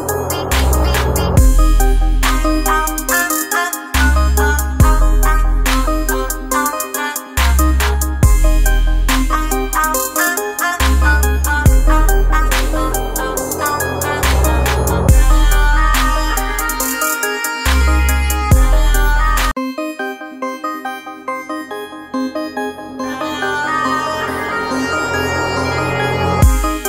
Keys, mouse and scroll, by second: 0.4 a, 2.2-3.2 typing, 4.9-7.8 typing, 9.9-12.1 typing, 13.6-15.1 typing, 16.4-18.5 typing, 20.3-26.2 drag.